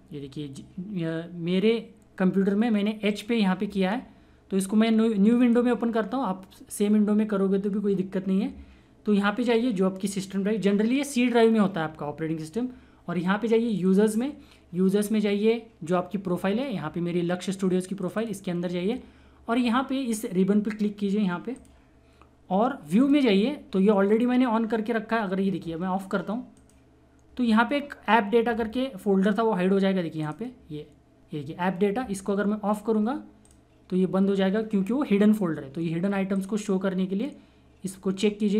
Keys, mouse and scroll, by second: 2.0 typing, 3.1 right click, 5.5 click, 5.5 typing, 13.7 click, 13.7 typing, 18.0 click, 18.0 typing, 21.5 click, 21.5 typing, 26.5 click, 26.5 typing, 29.2-30.2 typing, 30.2 click, 32.9-33.4 typing, 33.4 click, 33.4 click, 36.3 click, 36.3 typing.